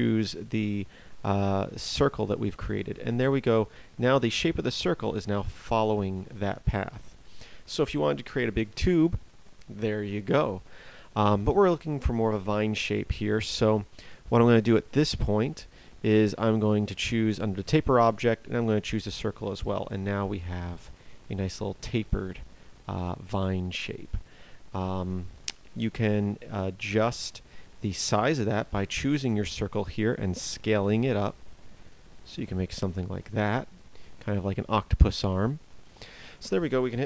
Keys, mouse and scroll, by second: 29.9 s.